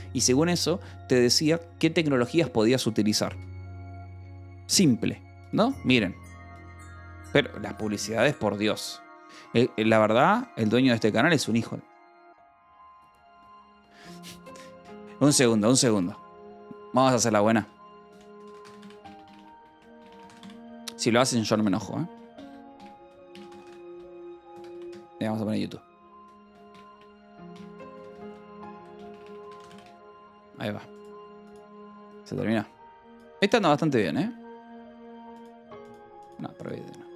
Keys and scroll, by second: 5.7 Escape, 17.7-30.1 typing, 25.0 Left.